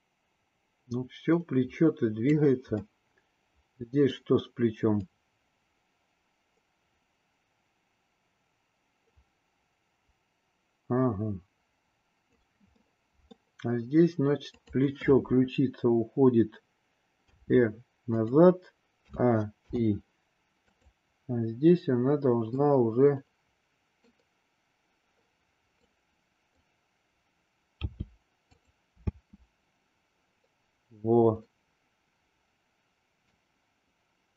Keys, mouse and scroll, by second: 2.8-4.2 middle drag, 5.1-12.4 drag, 12.7-13.3 middle drag, 17.2 r, 19.0 a, 19.7 i, 20.7 click, 22.6-24.1 middle drag, 25.7-26.5 drag, 27.7 g, 29.0 space, 31.4-33.4 middle drag.